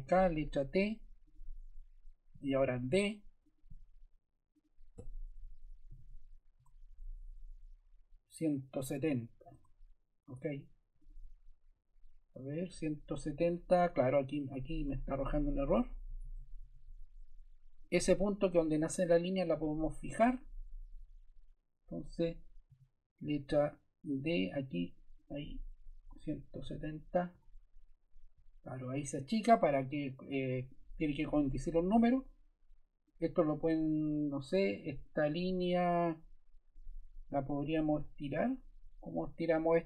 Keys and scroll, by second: 0.3 t, 2.6 d, 5.4-6.6 typing, 9.5 Escape, 14.8 BackSpace, 16.2 super+z, 16.7 super+z, 22.6 d, 24.7 Escape, 25.8-27.2 typing, 27.3 Return.